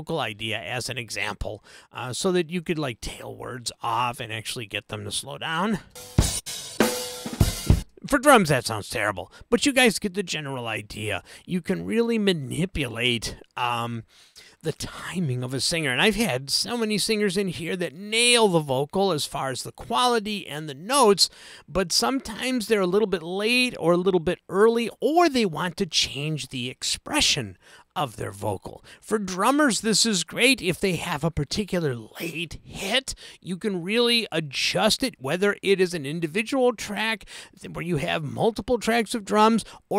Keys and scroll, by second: 5.9 space.